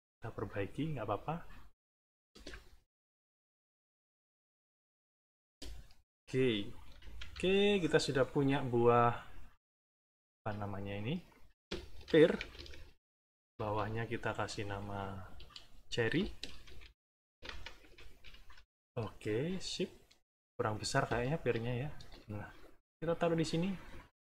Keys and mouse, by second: 0.7-2.2 drag, 2.3 space, 3.9 n, 4.5 click, 5.4 space, 6.0 middle click, 6.8 -, 7.6 click, 10.2 click, 10.8 click, 11.7-13.0 typing, 13.4 shift+Down, 13.7 Return, 14.6 Right, 15.2 BackSpace, 16.4-18.2 typing, 18.5 Return, 19.6 middle click, 20.5 click, 21.3 ctrl+shift+click, 22.5-24.0 ctrl+shift+drag.